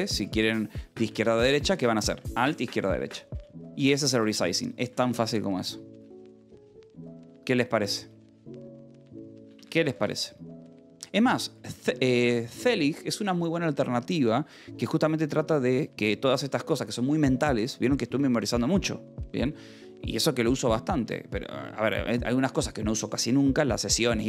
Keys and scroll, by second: 9.1-11.1 typing, 23.7 Escape.